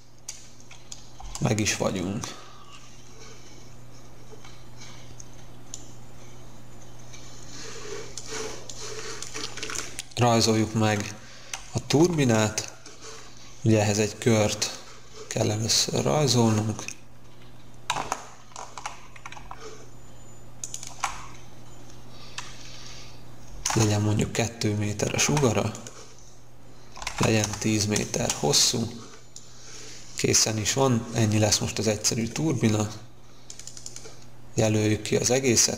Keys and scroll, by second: 1.1 space, 11.9 c, 23.4 2, 23.6 Return, 25.3 p, 26.7-28.1 typing.